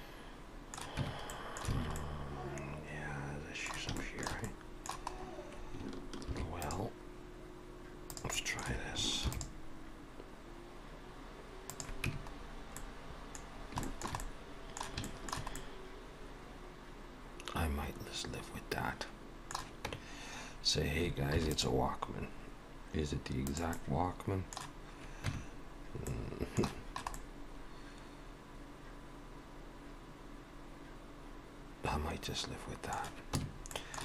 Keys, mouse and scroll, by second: 1.0 Tab, 1.3 middle click, 1.8 alt+a, 2.0 middle click, 4.0 shift+middle click, 4.4 middle click, 5.1-5.8 scroll up 1, 5.8-6.3 scroll up 1, 6.3 ctrl+r, 8.4 middle click, 9.3 ctrl+r, 12.1 Tab, 12.4-13.5 scroll down 3, 12.8 middle click, 13.5-13.8 scroll down 2, 13.9 shift+middle click, 14.2 middle click, 15.0 shift+middle click, 15.6 middle click, 20.0 Tab, 21.3 ctrl+r, 23.7 middle click, 25.3 Tab, 26.1 middle click, 27.1 middle click, 33.4 Tab, 33.7 middle click.